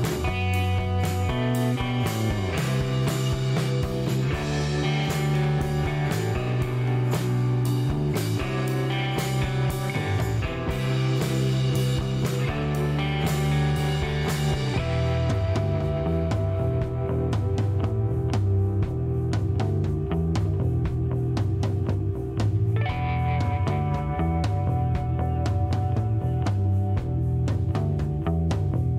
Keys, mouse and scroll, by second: 0.1 click, 1.0 click, 2.4 KP_6, 2.6 KP_5, 2.9 KP_Enter, 4.4-5.7 drag, 6.9 click, 7.7-8.1 scroll down 2, 8.2 middle click, 8.8 shift+right click, 10.0 shift+middle click, 12.1 click, 16.1 click, 16.8 click, 19.2 click, 22.9 click, 25.0 click, 28.0 click.